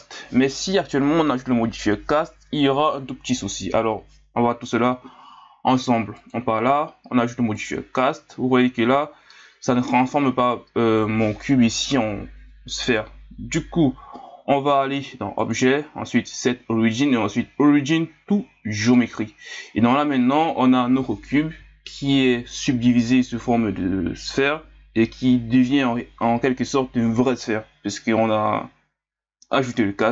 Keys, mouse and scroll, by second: 7.7-9.1 drag, 9.1 scroll up 2, 15.4-18.5 drag.